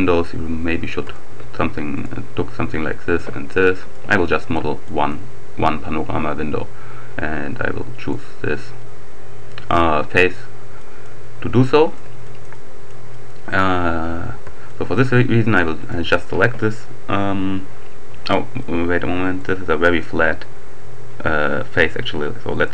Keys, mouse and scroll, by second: 0.8 shift+right click, 1.9 right click, 3.0 shift+right click, 3.6 shift+click, 4.2 shift+middle click, 4.8 shift+click, 8.0 right click, 10.8 click, 11.7-13.4 drag, 14.2-14.7 scroll up 1, 14.7 shift+click, 15.8 right click, 18.6-19.9 drag, 19.3 right click, 22.3 click.